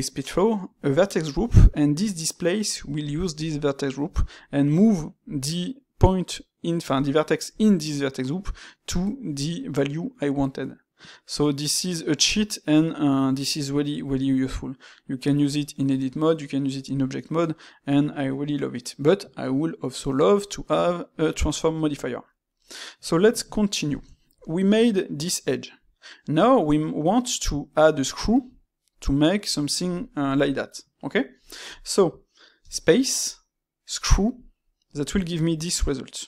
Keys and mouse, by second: 22.5-27.1 middle drag, 30.2-34.8 ctrl+middle drag.